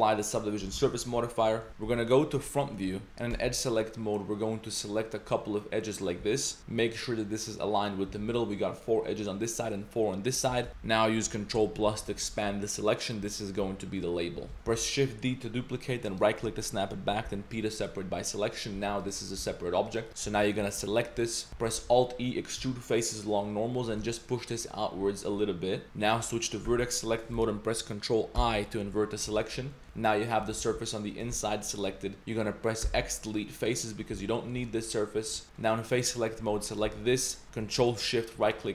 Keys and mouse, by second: 0.7 ctrl+a, 1.0 Tab, 1.5 middle click, 1.7 KP_3, 1.8 KP_1, 2.7 shift+middle drag, 3.3 2, 4.7 click, 5.9 ctrl+click, 6.6 z, 8.1 z, 10.8 ctrl+KP_Add, 11.6 ctrl+KP_Add, 11.8 ctrl+KP_Add, 12.0 ctrl+KP_Add, 12.3 ctrl+KP_Add, 12.5 ctrl+KP_Add, 13.2 ctrl+KP_Add, 14.4 ctrl+z, 14.5 shift+d, 14.7 shift+d, 16.8 click, 17.3 p, 18.4 drag, 18.5 middle click, 18.8 Tab, 19.0 click, 19.4 g, 20.1 Tab, 20.1 middle click, 20.3 a, 20.4 shift+middle drag, 20.8 drag, 21.7 alt+e, 26.7 1, 28.4 ctrl+i, 29.3 z, 29.7 click, 29.8 z, 29.9 click, 30.6 g, 31.3 z, 31.5 click, 32.8 x, 34.2 z, 34.4 click, 34.8 click, 35.4 3, 35.6 click, 36.7 click, 37.3 middle drag, 38.4 ctrl+shift+click.